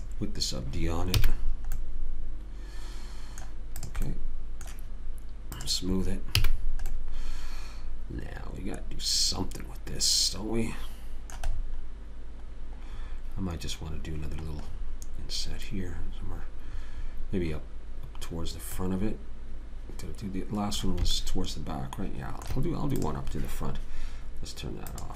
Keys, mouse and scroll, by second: 0.2 click, 1.6 a, 4.1 click, 6.7 a, 7.7 middle click, 13.0-21.0 middle drag, 21.5 middle click, 23.4 click.